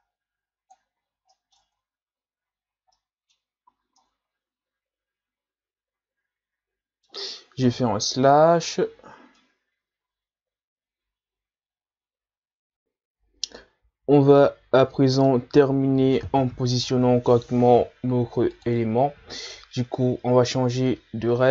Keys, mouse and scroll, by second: 1.0 ctrl+z, 1.3 middle click, 1.6 Tab, 2.6-3.0 scroll down 1, 3.0-3.7 middle drag, 3.7 a, 4.0-7.0 middle drag, 7.7 KP_Divide, 8.6 scroll down 2, 9.4-12.4 middle drag, 14.7-15.2 scroll down 2, 15.2-18.3 middle drag, 18.5-21.5 drag.